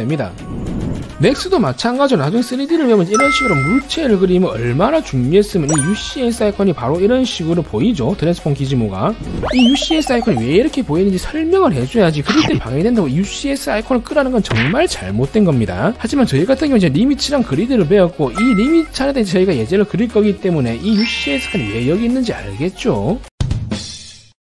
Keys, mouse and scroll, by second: 1.5 click, 1.9 alt+w, 3.3 click, 3.9 click, 5.0 w, 6.2 click, 7.1 ctrl+z, 7.6 click, 8.4 ctrl+z, 18.9 scroll down 1, 19.3 scroll up 1, 19.6 scroll down 1, 20.7 scroll up 1.